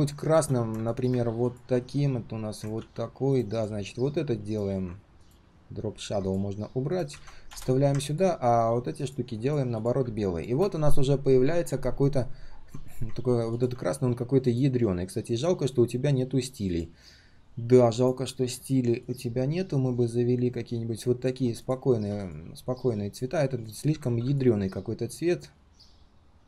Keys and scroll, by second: 2.7 ctrl+c, 7.1 ctrl+v.